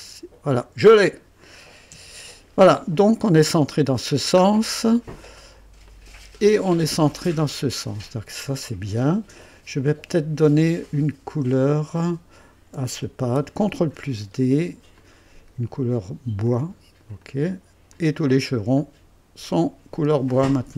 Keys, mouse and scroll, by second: 0.5 click, 1.7-2.4 typing, 4.4 scroll down 1, 5.1 scroll down 2, 5.9 click, 6.4-8.4 drag, 7.7-8.5 typing, 11.6 click, 13.7 ctrl+d, 14.9 click, 16.4 click, 17.2 click, 17.9 click, 18.8-20.2 drag.